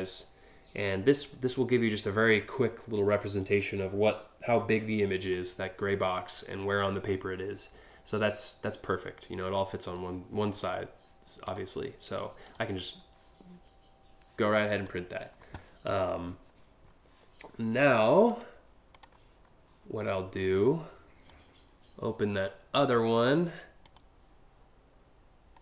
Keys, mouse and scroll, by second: 9.4 click, 11.0 click, 12.0 click, 14.5 click, 17.6 click, 17.9 click, 18.6 click, 20.0 click, 23.4 click, 25.2 scroll down 1.